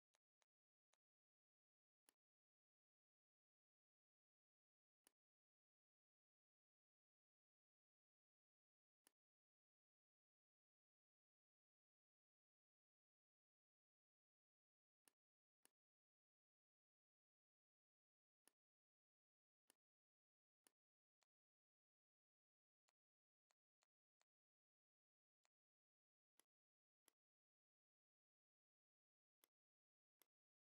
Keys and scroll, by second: 26.2 z, 27.0 space, 27.9 shift+m.